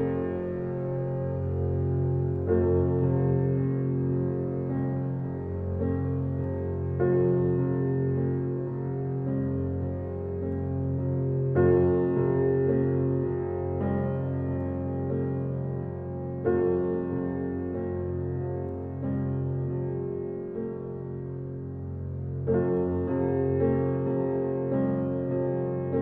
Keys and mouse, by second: 1.9-2.6 alt+drag, 3.1 alt+click, 3.1-3.4 typing, 4.4 click, 5.3-6.1 typing, 7.4-8.2 drag, 8.2-9.4 typing, 8.5-9.0 ctrl+alt+drag, 11.4-13.8 typing, 11.6-12.4 alt+drag, 15.2 click, 15.5-17.1 typing, 18.8-20.0 drag, 19.3-20.5 typing, 21.3 click, 21.8-22.6 typing, 23.9 super+d, 24.1 click.